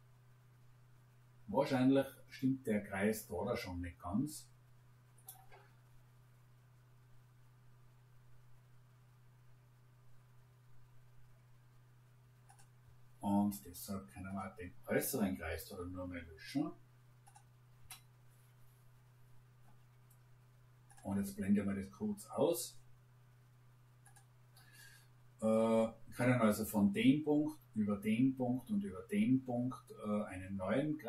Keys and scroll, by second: 17.7 Delete.